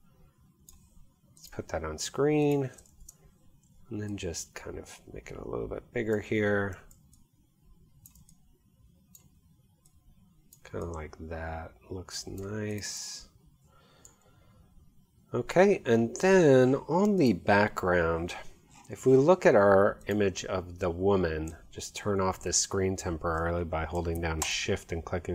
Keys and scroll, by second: 2.9 super+t, 3.7 alt+super+t.